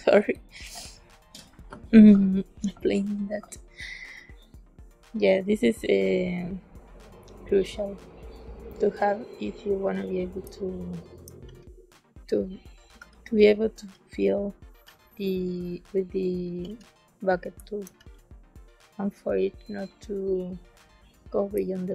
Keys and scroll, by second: 10.4 space, 11.4 b, 12.9 z, 13.7 s, 14.7 b, 16.6 g, 17.5 space, 17.9 b, 21.5 space.